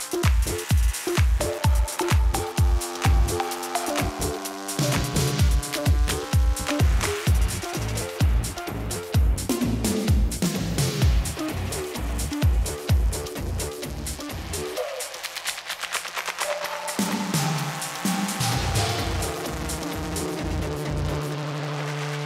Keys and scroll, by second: 15.1 ctrl+z, 21.8 Escape.